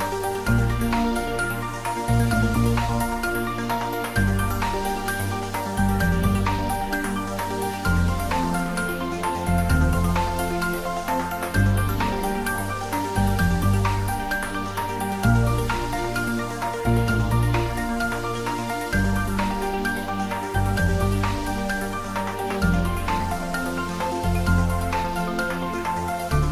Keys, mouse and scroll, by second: 0.6 click, 1.3 g, 4.6 click, 5.3-7.7 middle drag, 7.7-9.0 scroll up 1, 15.9 click, 19.1-20.7 typing, 21.4 Return, 25.5 click.